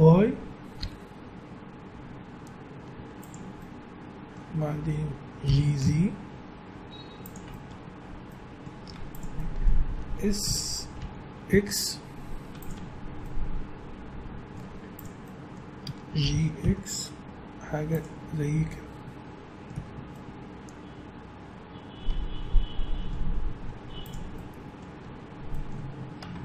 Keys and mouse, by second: 2.8 s, 3.6-5.2 middle drag, 5.4 g, 7.7 Tab, 8.8 Tab, 10.4 s, 12.7 Tab, 14.6 Tab, 16.2 g, 18.1 Tab, 19.7 a, 20.1 middle click, 20.4-22.5 middle drag, 23.3 middle click, 23.8 Tab, 23.9 middle click, 26.3 Tab.